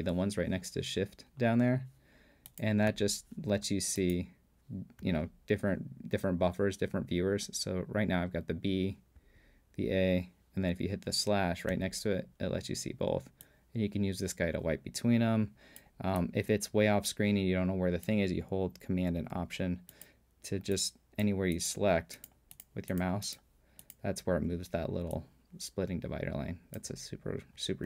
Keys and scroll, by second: 2.9 /, 5.0 ,, 7.1 ■, 9.2 ,, 11.7 /.